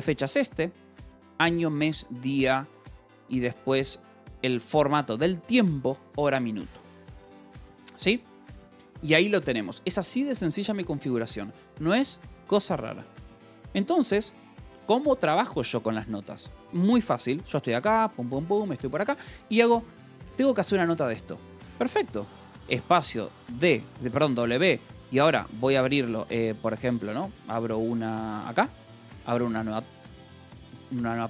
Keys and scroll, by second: 2.7 Escape, 3.0 j, 3.9 shift+v, 7.3 Escape, 7.7 j, 8.6 k, 9.3 g, 10.0 j, 18.4 k, 22.8 space, 22.9 w, 25.9 shift+1, 26.2 Escape, 26.5 j, 26.9 space, 27.5 w, 28.5-31.2 typing.